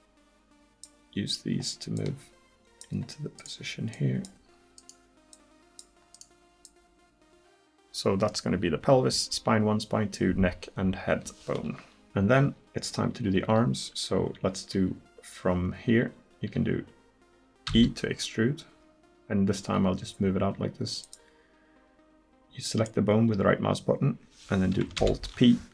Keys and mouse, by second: 3.1 right click, 12.0 KP_1, 17.7 e, 22.7-25.0 right drag, 25.0 alt+p.